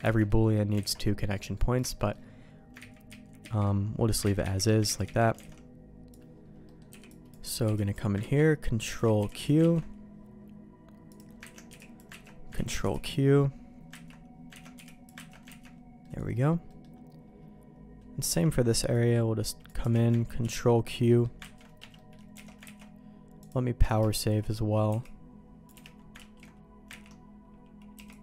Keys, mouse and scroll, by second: 0.0 ctrl+x, 0.2 middle click, 0.7 alt+a, 0.9 middle click, 1.3 middle click, 1.9 shift+middle click, 2.7 ctrl+z, 3.0 ctrl+z, 3.3 ctrl+z, 4.4 ctrl+z, 4.8 ctrl+z, 5.0 ctrl+z, 5.3 alt+a, 6.6 middle click, 6.8 b, 7.6 b, 8.1 ctrl+q, 8.9 alt+a, 9.5 b, 9.7 ctrl+q, 11.0 click, 11.5 ctrl+x, 11.6 b, 12.2 ctrl+q, 12.6 ctrl+x, 12.8 b, 14.0 ctrl+q, 14.5 ctrl+x, 14.7 b, 15.2 ctrl+q, 15.5 ctrl+x, 16.0 middle click, 16.6 middle click, 18.2 c, 21.9 middle click, 22.3 alt+a, 22.6 ctrl+s, 23.4 click, 24.0 shift+middle click, 24.8 c, 26.1 ctrl+q, 27.0 ctrl+x, 27.9 c.